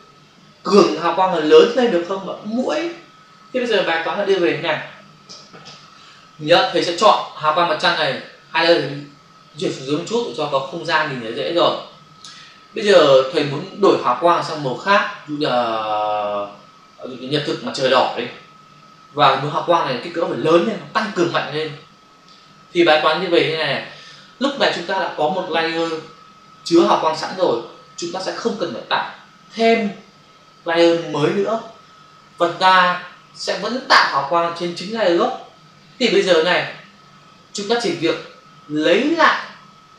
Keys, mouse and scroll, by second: 8.0 shift+click, 9.7 click, 12.1 click.